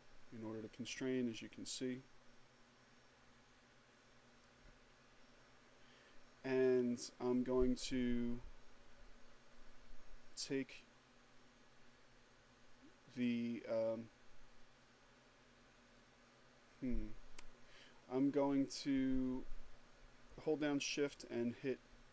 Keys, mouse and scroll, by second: 20.7 shift+click.